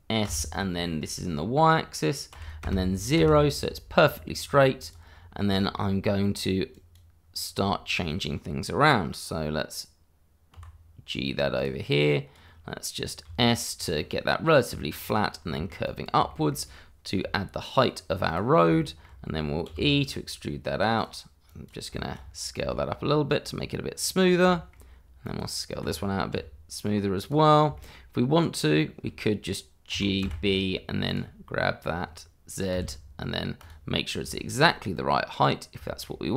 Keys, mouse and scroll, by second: 0.2 s, 2.6 y, 3.1 Return, 4.8 click, 5.1-5.5 scroll down 1, 5.5 shift+middle click, 6.7 click, 7.2-7.6 scroll down 1, 7.6 shift+middle click, 10.5 g, 11.5 click, 13.2 s, 14.9 click, 15.2 scroll down 1, 15.5 shift+middle click, 15.8 click, 16.3 shift+middle click, 17.2 g, 18.5 scroll down 1, 18.8 shift+middle click, 19.6 e, 20.9 click, 22.0 middle click, 22.1-22.6 shift+scroll up 1, 22.6 s, 24.0 click, 24.2 scroll down 1, 24.5 shift+middle click, 25.2 click, 25.9-26.3 scroll up 1, 26.3 s, 27.2 click, 27.4-27.7 scroll down 1, 27.7 shift+middle click, 29.9 g, 30.2 b, 31.1 click, 33.6 click, 34.0-34.3 scroll down 1, 34.3 shift+middle click, 35.4 scroll down 1, 35.8 shift+middle click.